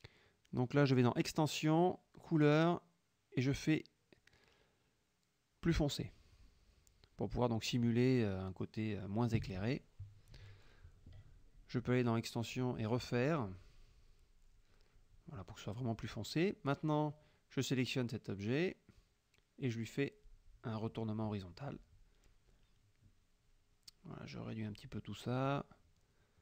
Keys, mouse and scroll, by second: 1.7 click, 6.1 click, 9.2 click, 10.1 click, 12.5 click, 17.0 click, 19.8 click, 21.7 shift+click, 22.2-23.6 shift+drag, 24.5-26.4 ctrl+drag.